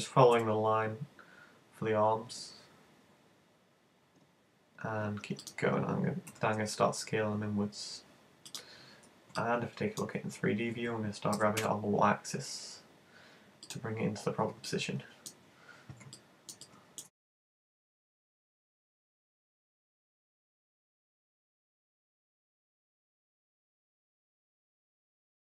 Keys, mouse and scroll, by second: 0.4 e, 5.6 click, 6.4 s, 8.5 click, 9.4 middle click, 11.4 g, 13.7 click, 14.7 middle click, 16.1 middle click, 16.7 click, 17.0 middle click, 17.1 right click, 17.3 shift+right click, 17.7 m, 17.9 u, 18.6 space, 20.0 middle click, 20.5 s, 20.9 click, 21.1 g, 22.0 click, 22.1 right click, 22.3 middle click, 23.4 right click, 23.6 shift+right click, 23.7 space, 24.3 s, 24.7 click, 24.9 g.